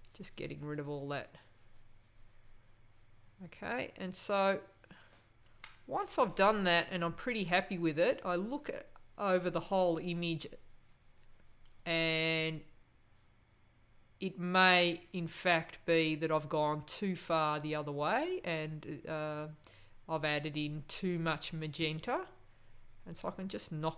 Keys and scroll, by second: 11.7 space.